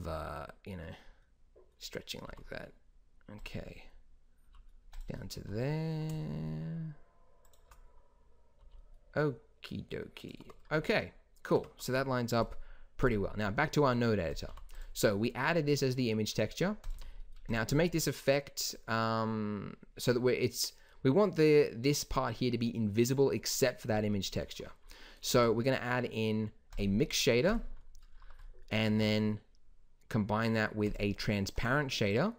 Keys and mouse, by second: 2.2 g, 4.5 g, 5.3 s, 8.6 g, 11.5 Tab, 14.4 g, 17.5 g, 25.3 shift+a, 28.9 shift+a.